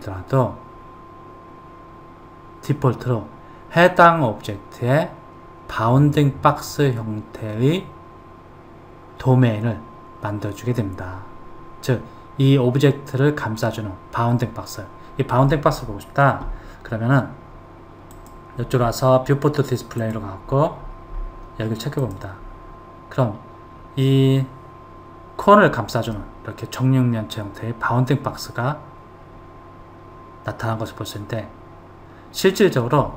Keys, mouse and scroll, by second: 18.5 click, 20.3 click, 21.1-22.4 scroll down 2, 22.4 click, 26.5-29.5 middle drag.